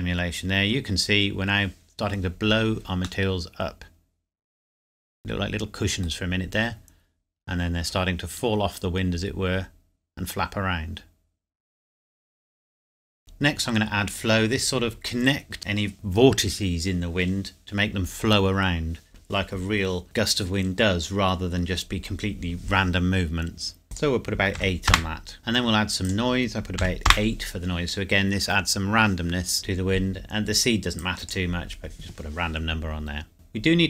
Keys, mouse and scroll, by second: 3.2 middle click, 13.2 click, 23.9 click, 24.5 KP_8, 24.8 KP_Enter, 26.0 click, 26.8 KP_8, 27.1 KP_Enter, 31.0 click.